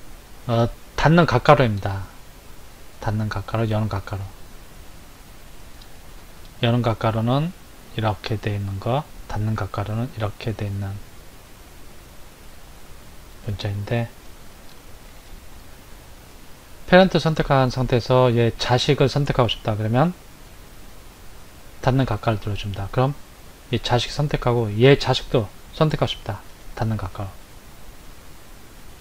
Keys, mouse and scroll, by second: 16.4 click, 17.1 click, 26.5 ].